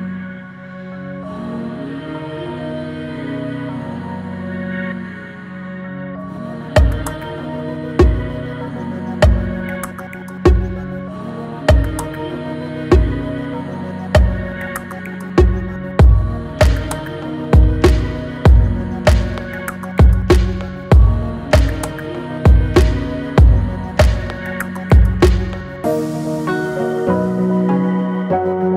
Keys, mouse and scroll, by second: 0.1 scroll down 1, 0.8 click, 1.0 click, 1.4-2.9 middle drag, 2.9 Tab, 3.2 Tab, 4.4 alt+click, 5.4 click, 5.6 alt+drag, 6.1 middle click, 6.6 scroll up 1, 6.9 middle click, 7.5-8.3 scroll down 2, 8.3 ctrl+r, 9.4 alt+click, 10.7 alt+click, 11.3 alt+shift+click, 11.7 middle click, 12.1-12.5 scroll down 1, 12.5-13.7 scroll up 1, 13.7 ctrl+b, 15.8 alt+e, 18.5 Tab, 18.7 scroll down 2, 19.0-19.4 middle drag, 19.4 click, 19.8-20.7 middle drag, 20.7 click, 21.3 click, 21.5 scroll up 1, 22.2-23.4 middle drag, 23.4 click, 24.4 g, 28.5-28.7 middle drag.